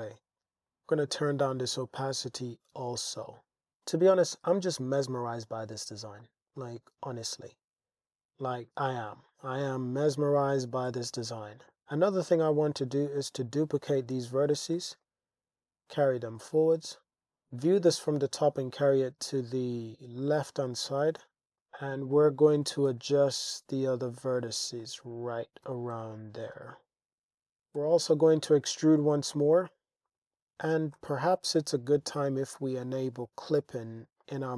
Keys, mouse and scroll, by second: 0.7-3.3 drag, 3.7-5.6 middle drag, 6.2 middle click, 7.5 click, 9.3 click, 9.8 click, 10.9 Tab, 11.6-13.4 drag, 14.2 shift+d, 14.7 y, 16.3 click, 17.3 g, 17.3 x, 17.9 g, 18.2 x, 20.2 click, 21.2 click, 21.6 click, 22.6 g, 22.9 x, 24.3 click, 25.6 g, 25.9 x, 27.2 Tab, 27.8 e, 28.3 x, 30.1 click, 31.0 Tab, 33.1 click, 34.2 click.